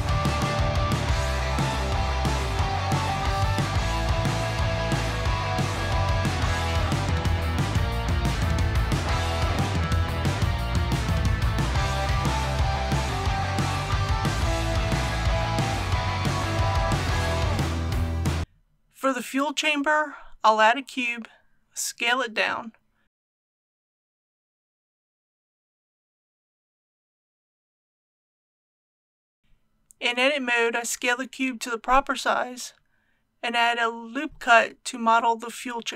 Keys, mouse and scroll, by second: 1.9 ctrl+r, 2.2 click, 5.3 click, 6.4 alt+click, 7.2 alt+shift+click, 8.6 ctrl+e, 11.7 alt+e, 12.6 click, 18.4 ctrl+a, 21.4 click, 22.4 s, 26.0 g, 26.6 x, 28.9 click, 30.3 Tab, 32.1 click, 33.5 1.